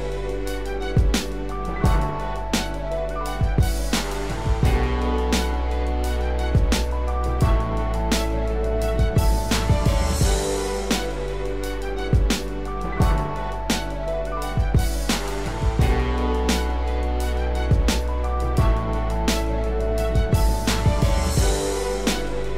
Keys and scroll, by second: 2.2 ctrl+d, 12.7 ctrl+z, 20.4 ctrl+d.